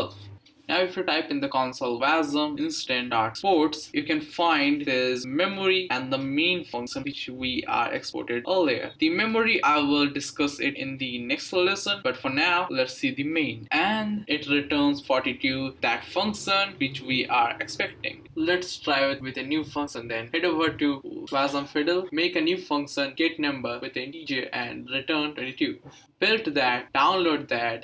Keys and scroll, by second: 0.0-2.4 typing, 13.7 Up, 14.0 Right, 14.5 typing, 14.9 Return, 21.8-25.4 typing.